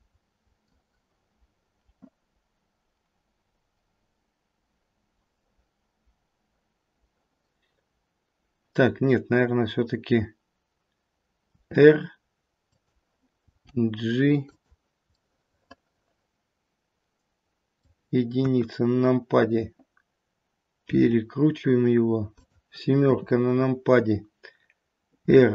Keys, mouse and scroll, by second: 11.6 r, 13.5 g, 15.1 middle click, 15.1-16.4 scroll up 1, 18.4 KP_1, 20.7 r, 23.0 KP_7, 25.1 r.